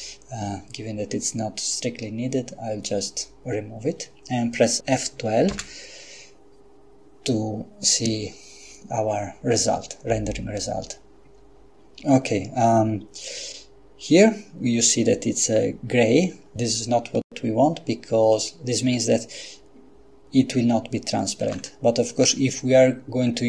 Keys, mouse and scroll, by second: 5.6 F12, 21.4 Escape.